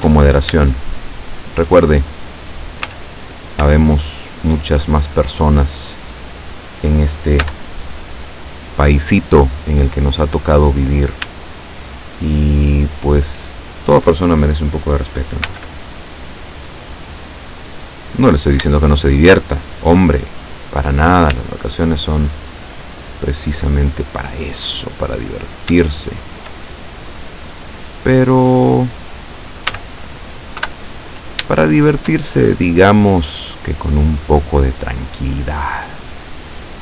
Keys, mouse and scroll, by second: 0.3-0.6 shift+scroll up 1, 0.9-1.9 shift+middle drag, 2.9 z, 3.7 z, 6.3 right click, 7.5 Tab, 10.9 right click, 11.7 shift+right click, 15.6 x, 16.6 click, 18.3 right click, 18.9 shift+right click, 21.0 right click, 21.7 shift+right click, 22.9 shift+middle click, 24.3 right click, 25.4 right click, 26.2 shift+right click, 27.5 middle click, 29.8 a, 30.6 KP_7, 31.7-34.6 shift+middle drag, 34.7-36.3 middle drag.